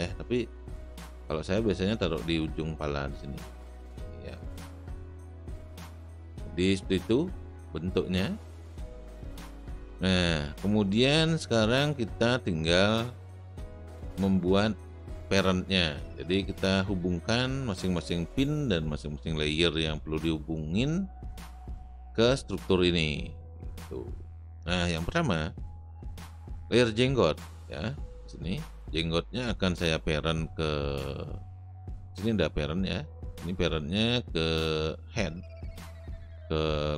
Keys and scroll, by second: 6.1 space.